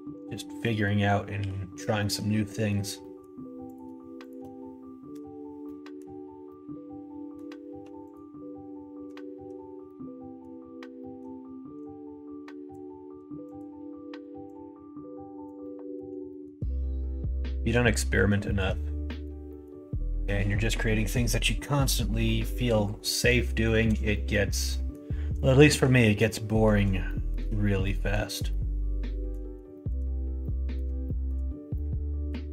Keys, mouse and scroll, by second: 0.3 middle click, 1.3 2, 1.9 middle click, 2.4 middle click, 2.9 middle click, 3.7 click, 4.1 shift+click, 5.1 f, 5.6 middle click, 6.4 middle click, 7.6 1, 8.0 click, 9.8 middle click, 10.9 middle click, 11.8 click, 13.4 click, 14.4-15.4 drag, 15.6 scroll up 1, 15.7 middle click, 15.9 scroll down 1, 16.2 scroll up 1, 16.3 shift+middle click, 16.9 scroll up 1, 17.0 middle click, 17.9 middle click, 18.4 shift+middle click, 19.0 middle click, 19.4 middle click, 21.8 middle click, 23.1-24.1 scroll up 3, 23.1 middle click, 23.7 shift+middle click, 24.1 middle click, 24.6 middle click, 25.5 shift+middle click, 26.1 middle click, 27.0 shift+middle click, 27.8 scroll up 1, 27.9 middle click, 28.4 middle click, 29.7 shift+middle click, 30.4 scroll up 1, 30.4 middle click, 31.0 scroll up 1, 31.1 shift+middle click, 31.7-32.3 scroll up 1.